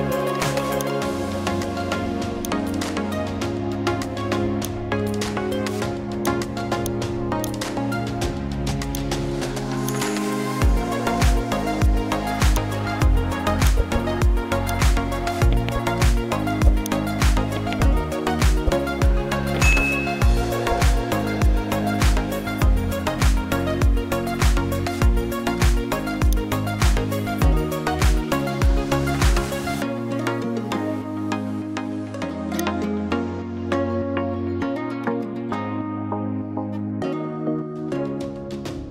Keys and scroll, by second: 18.6 ctrl+i.